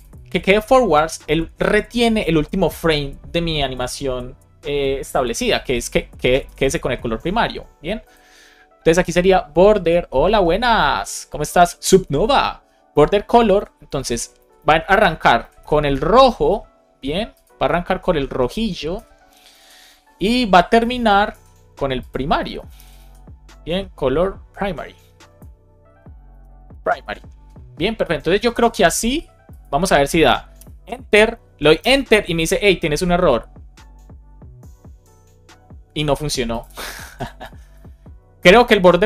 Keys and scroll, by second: 12.8 Return, 13.3 Right, 13.9 alt+shift+Right, 15.0 shift+Left, 15.8 BackSpace, 17.8 shift+super+Right, 18.2 BackSpace, 19.5 super+Left, 20.8 shift+super+Right, 21.2 super+c, 22.4 super+Right, 22.7 shift+super+Left, 22.9 super+v, 26.9 super+s, 30.5 Return, 31.7 Return, 36.7 super+s.